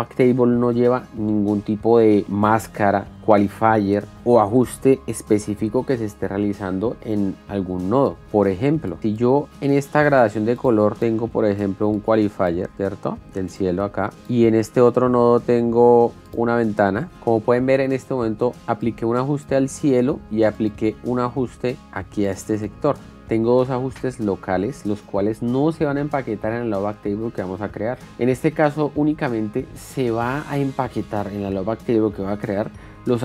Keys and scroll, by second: 9.0 alt+s, 10.6 alt+s.